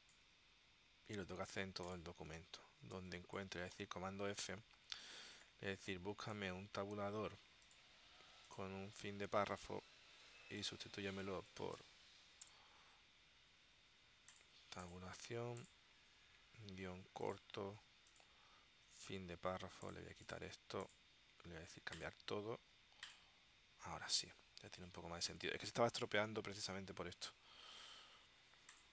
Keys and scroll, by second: 3.1 space, 12.6 BackSpace.